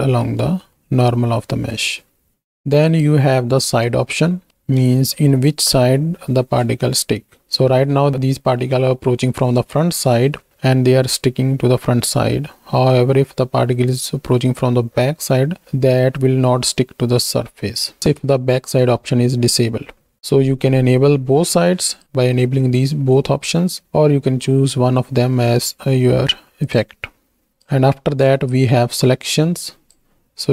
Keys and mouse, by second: 0.8 click, 2.3 KP_1, 2.3 z, 2.8 click, 4.2 shift+click, 5.1 shift+click, 21.9-23.8 drag, 26.6 click, 27.5-30.0 drag.